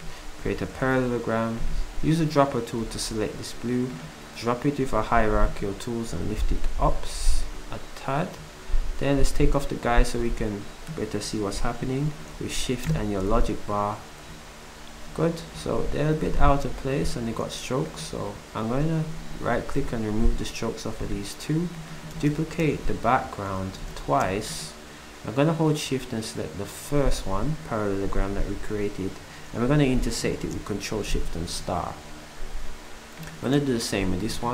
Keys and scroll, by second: 0.4 s, 7.4 s, 22.6 ctrl+shift+d, 23.8 d, 31.1 ctrl+shift+8.